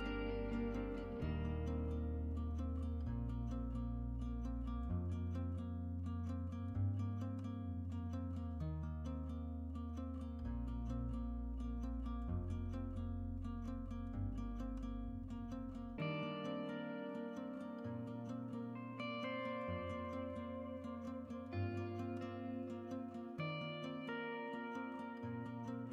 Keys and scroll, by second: 5.6 BackSpace.